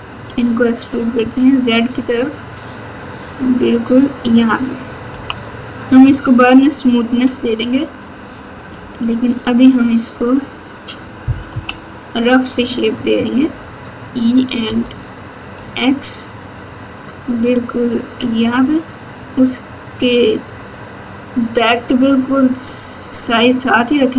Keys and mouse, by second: 0.2 e, 5.1 KP_2, 6.3-7.1 ctrl+KP_8, 10.0-10.6 drag, 11.4 KP_1, 13.3 e.